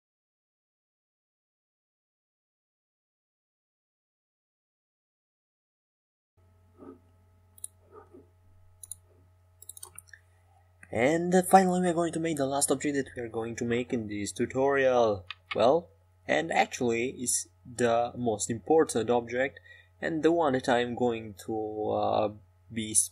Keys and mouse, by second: 0.7-2.2 middle drag, 3.0 a, 4.2 a, 4.6 a, 5.6 c, 9.5 c, 12.5 h, 16.7 middle click, 17.6 shift+a.